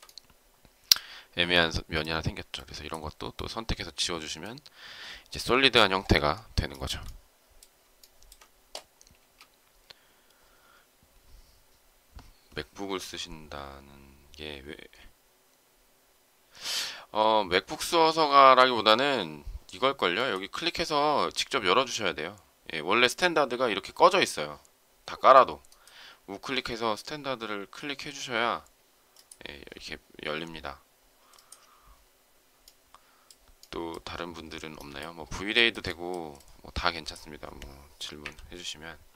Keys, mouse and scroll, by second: 6.6 shift+middle click, 7.9 shift+middle click, 9.1 space, 35.5 shift+middle click, 38.2 Delete.